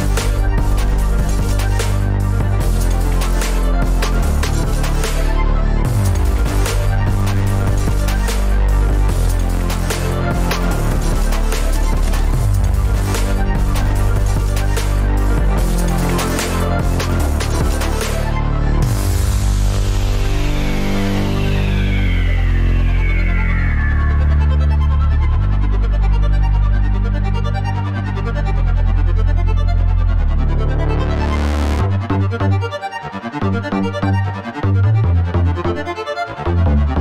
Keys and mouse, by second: 0.5 middle drag, 0.8 Tab, 1.1 alt+z, 1.4 click, 1.5 Tab, 1.9-2.3 middle drag, 2.4 click, 2.5 g, 3.1 g, 4.3 Tab, 4.5 Tab, 4.6 middle click, 5.3 Tab, 6.0 `, 6.4 click, 8.4 alt+z, 8.6 click, 8.9 g, 13.2-13.5 middle drag, 13.7 Tab, 14.1 alt+z, 14.2 alt+z, 14.4 alt+z, 14.6 Tab, 14.8 Tab, 14.9 Tab, 15.1 middle click, 15.6-16.9 drag, 18.0 click, 20.3-20.8 drag, 22.9-23.2 ctrl+drag, 23.5 ctrl+click, 23.9 ctrl+drag, 24.5 ctrl+click, 24.7 middle click, 25.5-26.1 ctrl+drag, 27.2-28.6 drag, 29.1 Tab, 29.7 alt+z, 29.8-31.5 middle drag, 31.6 click, 31.7 Tab, 32.1 middle click, 34.5 middle click, 35.7 shift+drag.